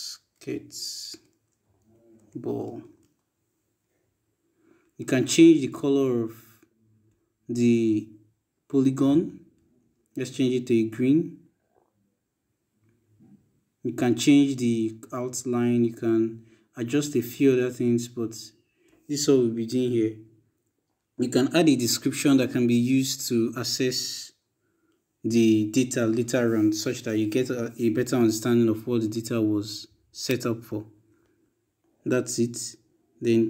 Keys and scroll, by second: 0.0-2.8 typing.